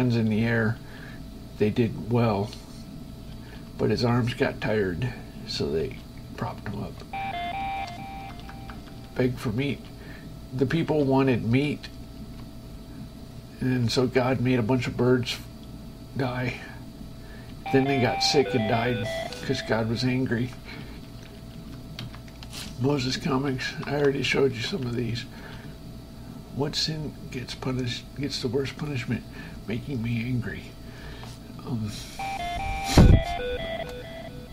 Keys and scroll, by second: 7.0 shift+Escape, 8.0 shift+Escape, 8.4 Down, 9.9 space, 12.4 shift+Escape, 17.7 space, 19.3 shift+Escape, 20.9 Down, 23.2 space, 23.8 Down, 24.2 Right, 24.3 Down, 25.7 space, 31.3 shift+Escape, 34.0 shift+Escape.